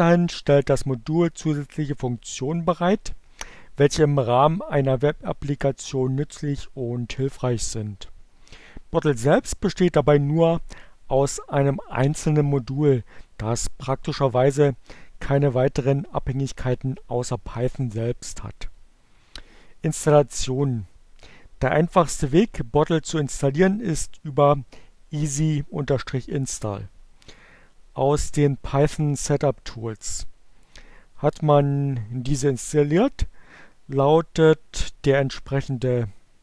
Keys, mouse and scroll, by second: 35.6 Up, 36.1-36.4 drag.